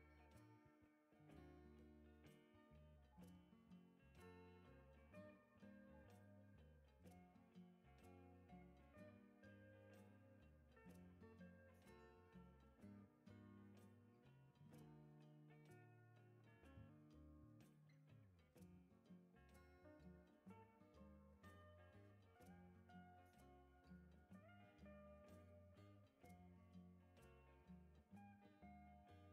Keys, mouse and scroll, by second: 0.1 click, 2.1 right click, 2.5-2.9 scroll down 2, 5.2 click, 5.7 scroll down 1, 6.0 right click, 6.8 click, 7.8 right click, 8.7-9.3 scroll up 4, 9.6 scroll up 2, 12.0 click, 12.3 scroll down 2, 13.0-13.4 scroll up 4, 14.3 click, 14.6-15.0 scroll down 2, 15.3 right click, 15.8-16.3 scroll up 2, 17.2 click, 17.5 scroll down 2, 17.7 right click, 18.3 scroll up 2, 19.7 click, 20.5 right click, 23.7 right click, 24.4 scroll down 1, 24.7 right drag, 25.2 scroll down 2, 25.2 scroll up 2, 26.5 click, 27.5 ctrl+click, 28.2 click.